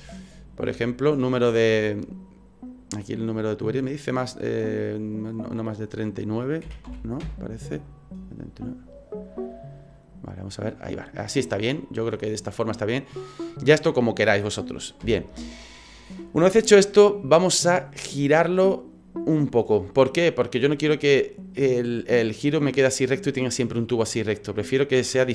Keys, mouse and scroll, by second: 4.8 click, 11.0 middle click, 12.4 scroll down 4, 12.6 middle click, 15.0 KP_1, 17.1-18.1 scroll up 2, 20.8 middle click, 23.5 middle click.